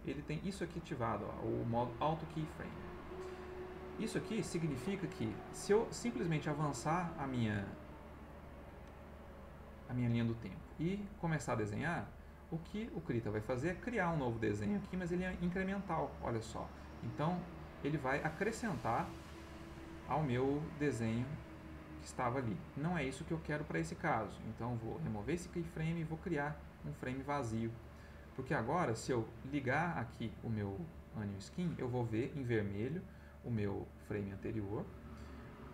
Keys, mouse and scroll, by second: 6.2-10.3 drag, 11.3 click, 13.4 click, 14.7-16.6 drag, 17.2 click, 18.8 click, 21.1-21.6 drag, 21.9-22.5 drag, 24.1-25.2 right drag, 25.5-26.7 right drag, 29.7 click, 30.4 click, 31.0 click, 33.3 ctrl+middle click.